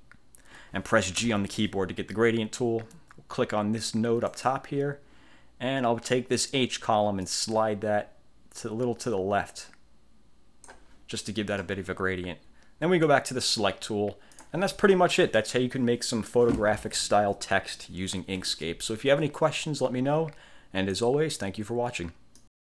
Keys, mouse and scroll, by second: 1.3 g, 4.4 click, 7.3-11.0 drag, 13.1 click, 14.5 click, 21.1 click, 22.5 click.